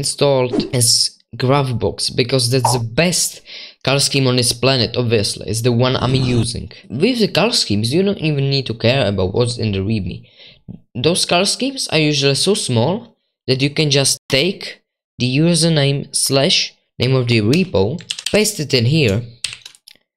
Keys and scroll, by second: 18.1 ctrl+c, 18.1 super+2, 18.2 ctrl+v, 19.4-20.1 typing.